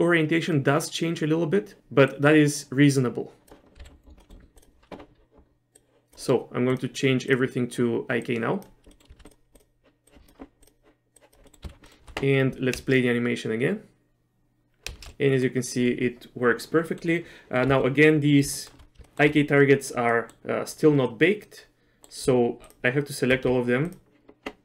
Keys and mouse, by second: 0.0-1.8 drag, 2.2-3.5 drag, 3.9 z, 4.3 middle click, 4.6 click, 5.8 click, 6.8 click, 8.3 click, 8.9 middle click, 9.3 click, 10.1 click, 10.7 click, 11.2 click, 11.5 middle click, 11.7 z, 11.9 middle click, 12.9 shift+space, 15.1 shift+space, 15.4 middle click, 17.0 middle click, 17.8 z, 18.6 shift+middle click, 19.1 shift+middle click, 19.2 shift+click, 20.2 middle click, 21.2-22.2 middle drag, 22.8 shift+click, 24.0 shift+click.